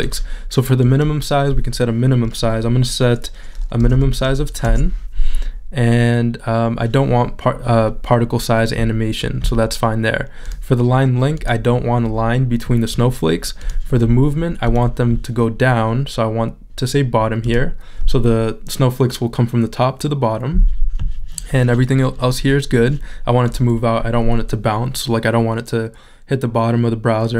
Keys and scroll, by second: 3.8 |, 5.7 Return.